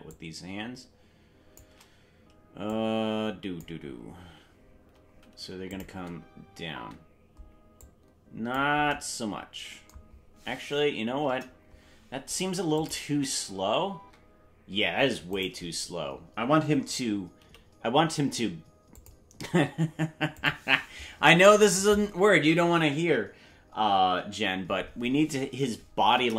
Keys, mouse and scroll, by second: 0.1-1.6 shift+drag, 2.7 click, 5.7 click, 5.9 space, 6.9-7.8 scroll down 1, 6.9 space, 7.8 click, 11.2 KP_0, 12.8 click, 13.1 space, 15.3 right click, 17.4 g, 20.4 click, 26.1 KP_0.